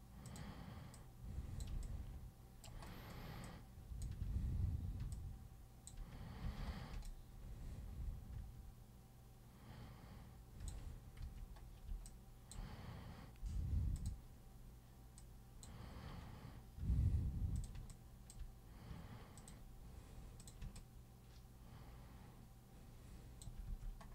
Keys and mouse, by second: 0.2 super+click, 0.9 super+click, 1.9 alt+super+click, 3.4 alt+super+click, 5.1 alt+super+click, 6.5 super+3, 7.0-10.7 alt+super+drag, 11.2 super+1, 12.0-12.5 alt+super+drag, 14.0 super+click, 15.2 super+click, 17.6 super+click, 17.9 alt+super+click, 19.4 super+click, 20.4 super+click, 20.8-23.4 alt+super+drag, 23.7 super+w.